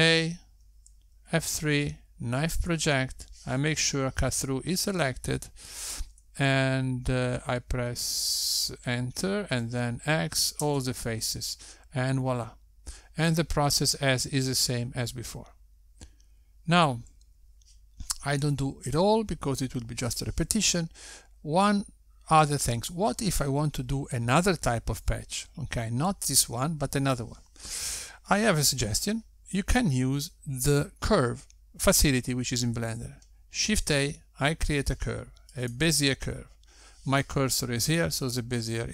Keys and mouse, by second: 0.3 Tab, 1.7 a, 3.1 F3, 10.7 Return, 11.4 x, 19.1 Tab, 20.2 x, 34.5 shift+a.